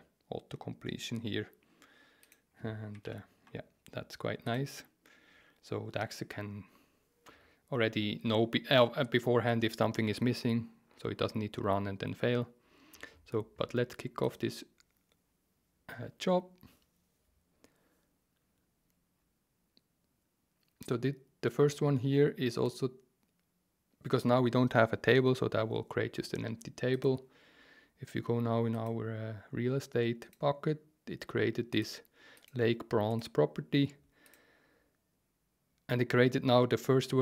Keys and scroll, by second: 3.0 super+z.